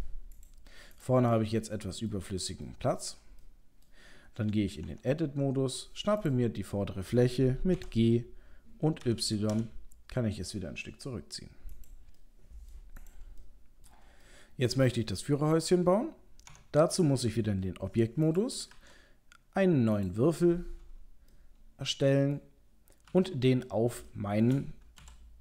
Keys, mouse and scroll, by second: 0.3 click, 0.9 click, 1.4 middle click, 2.7 ctrl+middle click, 3.4 middle click, 4.8 Tab, 6.2 click, 6.6 middle click, 7.8 g, 12.2 middle click, 13.0 click, 13.4 middle click, 13.8 middle click, 14.2 shift+middle click, 15.1 middle click, 15.6 click, 16.5 Tab, 18.3 click, 18.7 shift+a, 21.3 middle click, 22.3 middle click, 23.1 KP_3, 23.8 scroll up 1, 24.1 shift+middle click, 25.0 g.